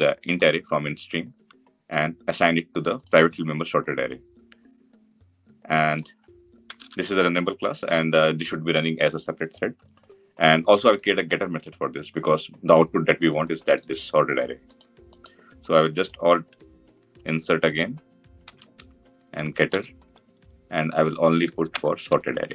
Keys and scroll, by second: 18.4 alt+Insert, 20.6 Down.